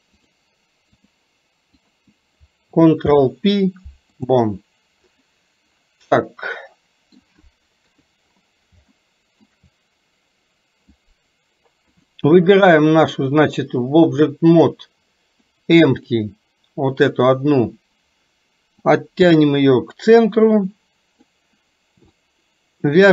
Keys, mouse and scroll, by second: 0.2 click, 1.9 click, 3.1 ctrl+p, 6.2 middle click, 7.8 KP_3, 9.0 shift+middle click, 12.1 click, 14.3 click, 16.1 click, 19.0-21.4 drag.